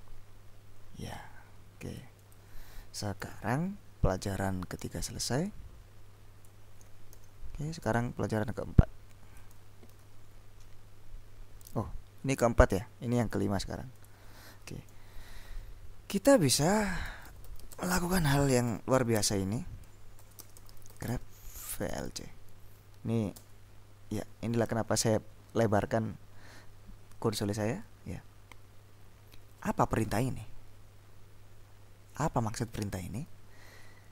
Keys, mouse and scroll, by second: 0.0-2.9 drag, 3.3 ctrl+l, 5.5-7.0 drag, 7.2 ctrl+s, 8.0 click, 10.0 ctrl+b, 14.2 click, 17.0-22.6 typing, 23.5 Return.